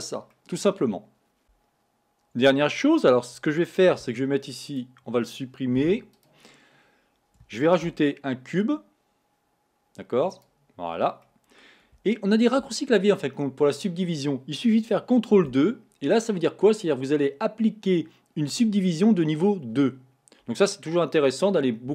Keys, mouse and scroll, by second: 0.3-2.3 middle drag, 3.9 Tab, 4.7 click, 5.9 x, 7.7 shift+a, 11.2-15.4 middle drag, 15.5 ctrl+2.